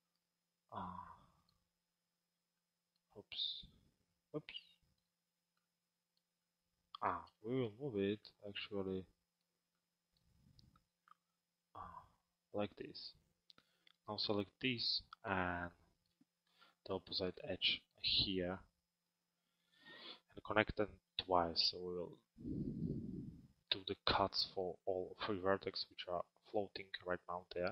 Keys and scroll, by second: 2.3 alt+space.